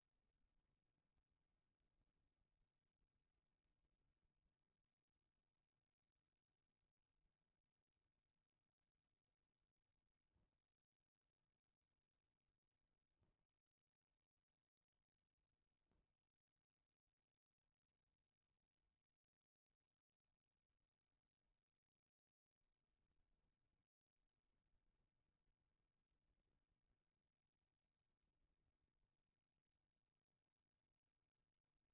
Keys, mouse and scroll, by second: 1.7-4.9 middle drag, 5.0-9.3 middle drag, 9.7-13.8 middle drag, 16.0-29.3 drag, 31.3 shift+middle drag, 31.7 middle click.